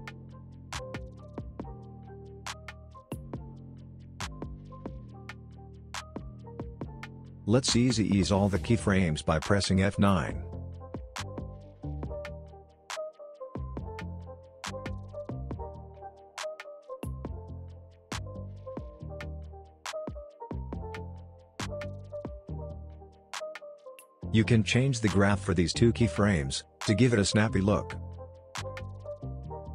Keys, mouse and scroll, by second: 2.4 space, 5.4 click, 7.1 u, 7.8-8.7 drag, 9.4 F9, 11.4-12.3 click, 12.1 space, 14.7 space, 15.3-16.6 drag, 20.2 space, 23.1 space, 24.2-25.4 drag, 28.0-29.7 drag.